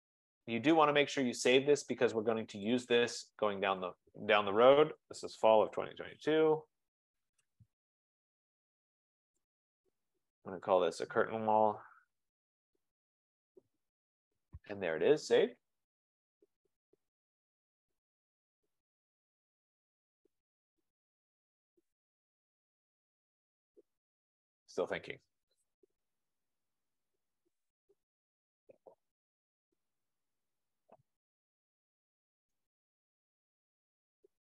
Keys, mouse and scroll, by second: 0.1 click, 0.6 click, 2.7 click, 3.0 click, 4.0 click, 5.4-6.1 typing, 5.6 F2, 6.0 F20, 7.5 Return, 9.6 click, 9.9 click, 10.9 click, 11.3-13.7 typing, 17.4-18.1 typing.